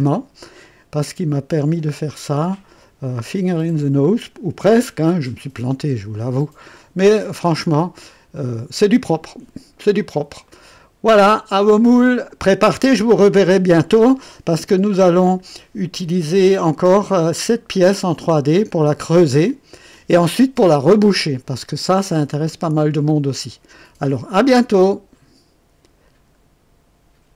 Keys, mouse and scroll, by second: 7.3-8.2 drag, 8.3 right click, 10.4-11.1 right drag, 25.0 right click, 27.3 click.